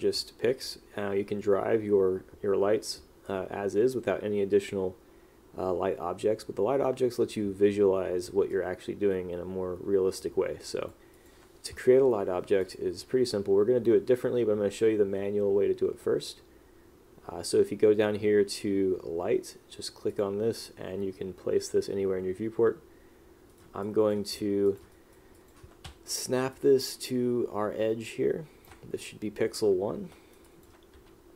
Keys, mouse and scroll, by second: 8.6 click, 11.3 click, 23.6 right click, 24.0 click, 24.8 click, 25.1 right click, 25.5 click, 26.7 click, 30.3 right click, 30.6 click.